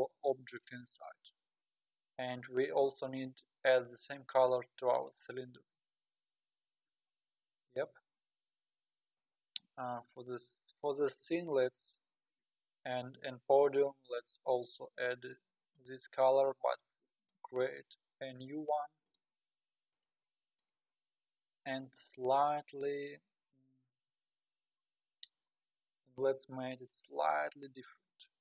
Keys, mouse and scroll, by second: 0.6 click, 2.9 click, 4.0 click, 5.1-6.2 drag, 6.2-7.2 scroll up 15, 7.5 scroll up 1, 8.1-8.7 scroll up 6, 9.2 scroll up 4, 9.7 scroll down 1, 10.2 scroll up 2, 10.6 scroll down 2, 11.4 click, 13.5 shift+click, 14.6 click, 16.2-19.6 drag, 20.7-22.8 drag.